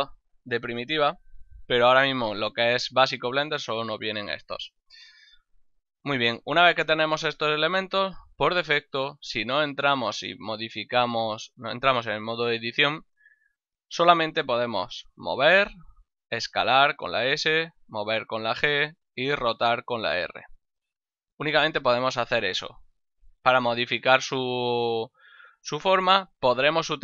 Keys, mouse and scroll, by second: 7.6 right click, 14.6 g, 15.4 right click, 16.0 s, 17.2 right click, 18.0 g, 18.7 right click, 19.2 r, 20.5 right click.